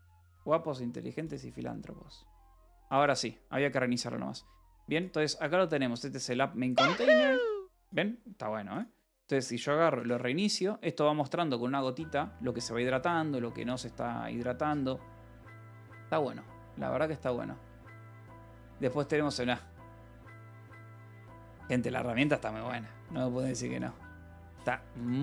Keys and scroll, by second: 10.5 ctrl+r.